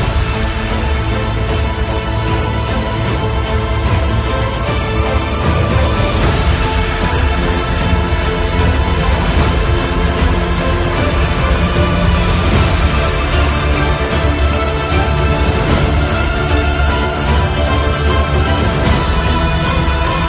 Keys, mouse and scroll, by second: 1.0-5.5 alt+shift+drag, 2.4 typing, 5.5 ctrl+g, 7.6-11.3 alt+shift+drag, 11.9 typing.